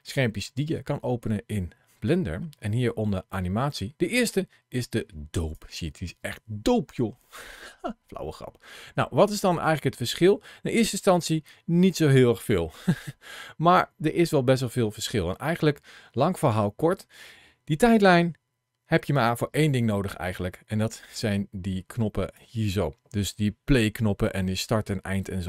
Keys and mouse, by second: 9.4-22.2 drag, 22.9 ctrl+shift+a.